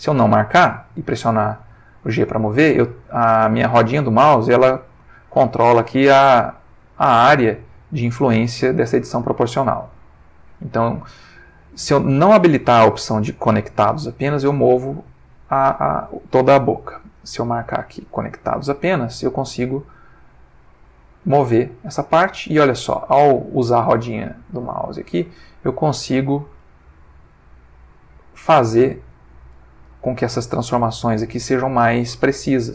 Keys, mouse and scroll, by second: 0.5 g, 2.5-4.0 scroll up 3, 4.1 scroll down 1, 4.8-5.2 scroll down 1, 6.6-7.0 scroll up 1, 7.1-7.7 scroll down 1, 15.8 Escape, 17.1 click, 17.8 click, 19.4 g, 20.2-20.7 scroll up 1, 20.7-23.0 middle drag, 23.0-23.6 scroll up 1, 23.6 middle click, 23.7 scroll down 1, 24.9 scroll up 1, 25.2 click, 25.9 click, 26.6 g, 27.5-28.0 scroll up 1, 28.8 click, 29.9 r, 31.0 click, 31.7 click, 32.1 r.